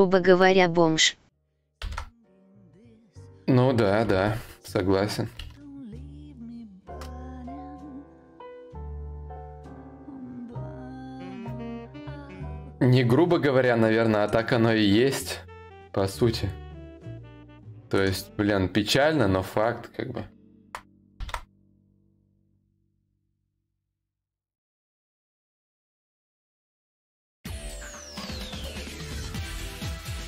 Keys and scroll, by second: 1.4 ctrl+c, 5.0 ctrl+z, 6.0 ctrl+shift+c, 7.6 ctrl+shift+v.